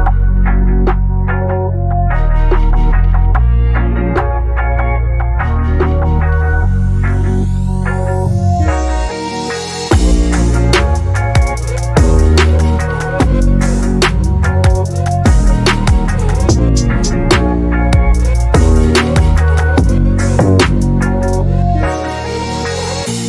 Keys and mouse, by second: 0.2 shift+middle click, 0.4 middle click, 0.9 click, 1.1 middle click, 1.3 click, 1.5 click, 1.8 click, 2.0 shift+a, 3.0 shift+a, 5.5 click, 5.6 click, 5.9 click, 7.7 click, 9.1 click, 10.3 middle click, 10.4 click, 10.6 click, 12.3 shift+middle click, 12.6 shift+middle click, 12.9 shift+middle click, 13.2 click, 13.6 KP_0, 16.4 middle click, 16.8 middle click, 16.9 Tab, 17.1 Tab, 17.2 shift+middle click, 18.2 middle click, 18.9 middle click, 19.5 click, 19.9 click, 21.2 middle click, 21.5 click, 22.2 middle click, 22.8 middle click, 23.0 middle click.